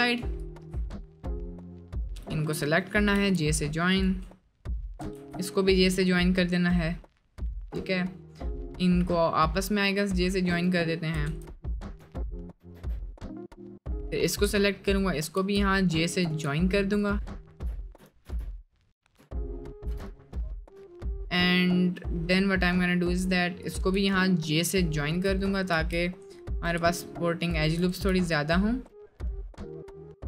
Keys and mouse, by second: 3.2 j, 5.2 j, 5.6 middle click, 6.7 middle click, 11.3 j, 12.7 j, 13.2 middle click, 13.5 middle click, 15.4 j, 17.6-20.1 drag, 19.8 j, 20.1 middle click, 20.4 middle click, 20.9 middle click, 21.4 middle click, 21.9 middle click, 22.3 middle click, 25.8 j, 28.0 j, 28.3 middle click, 28.6-29.6 drag, 29.6 middle click.